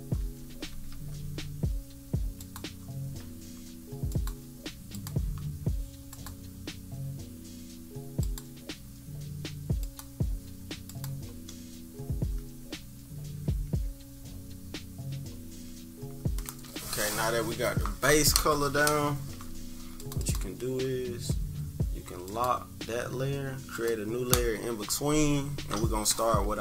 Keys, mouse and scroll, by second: 0.2 =, 0.4 =, 0.7 =, 0.9 =, 2.4 click, 4.0 click, 8.2 click, 9.7 click, 10.8 click, 11.2 -, 11.5 -, 11.8 -, 12.0 -, 12.6 scroll up 2, 13.6 =, 14.0 scroll down 2, 15.4 -, 15.8 scroll down 2, 20.0 click, 20.1 click, 22.2 click, 23.7-26.6 drag.